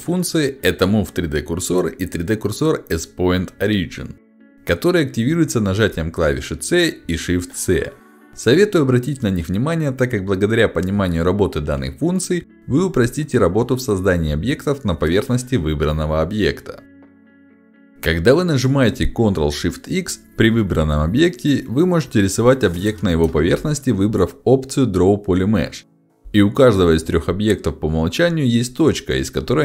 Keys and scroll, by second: 18.1 ctrl+shift+x, 23.0 5, 25.7 5.